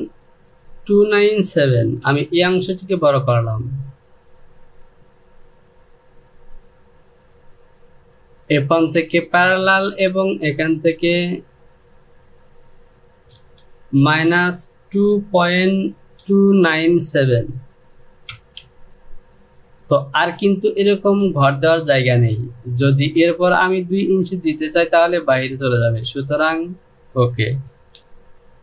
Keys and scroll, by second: 13.1 Down, 13.7 KP_Subtract, 14.6-16.9 typing, 17.9 Return.